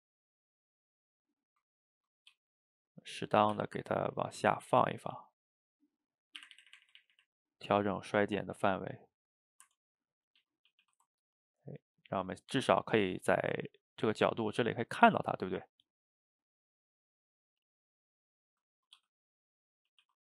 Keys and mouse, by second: 0.7-2.4 middle drag, 2.4 g, 3.6 r, 4.5 g, 9.3 middle click, 9.7 Tab, 10.1-10.4 middle drag, 10.4 shift+z, 10.7 a, 10.9 a, 11.1-17.3 ctrl+middle drag, 17.3 click, 17.5-19.0 middle drag, 19.0 g, 19.9 a, 20.0 a.